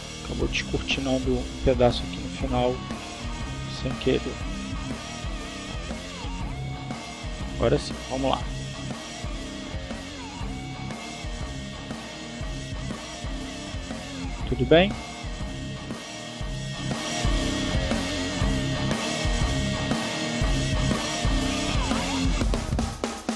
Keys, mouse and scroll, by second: 1.5-2.6 drag, 3.0-6.8 drag, 6.9 click, 7.7 click, 8.5 click, 12.8 click, 13.6 click, 14.3 click, 14.9 click, 19.8 click, 21.3 click.